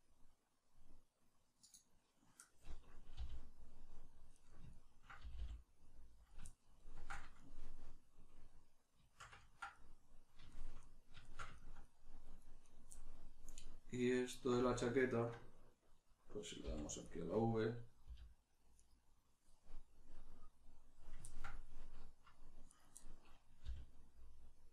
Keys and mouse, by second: 1.7 click, 3.2 g, 4.4 right click, 4.7-6.3 ctrl+middle drag, 5.2 g, 6.3 click, 6.4-12.6 ctrl+middle drag, 12.6 right click, 16.6 middle click, 16.6 v, 17.2 right click, 18.0 g, 18.9 right click, 21.2-22.7 ctrl+middle drag, 22.7 right click, 23.6-24.7 middle drag, 23.6 g.